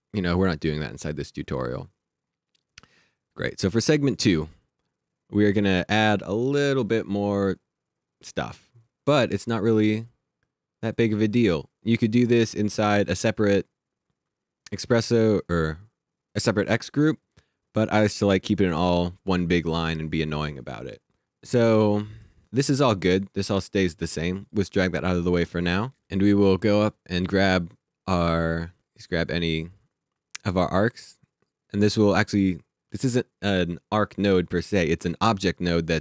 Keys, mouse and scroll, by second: 4.0 click, 8.8 click, 18.0 click, 22.4 click, 29.3 click, 33.0 click.